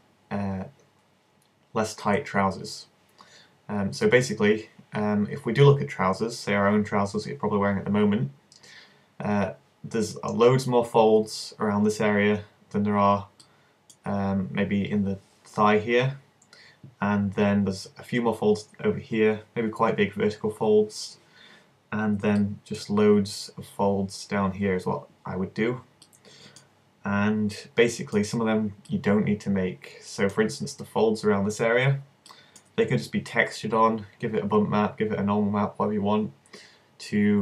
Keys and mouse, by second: 31.4 middle click.